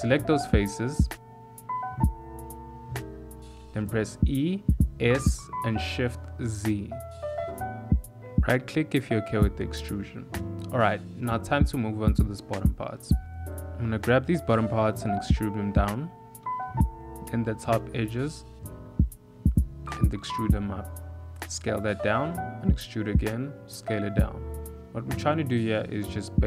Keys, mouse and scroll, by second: 1.2 alt+click, 2.0 alt+shift+click, 2.9 alt+click, 3.7 e, 4.4 s, 9.1 shift+middle click, 9.9 1, 10.3 click, 11.6 e, 12.5 s, 14.1 e, 16.7 shift+middle click, 17.1 click, 18.4 click, 19.9 e, 20.9 s, 25.3 ctrl+r.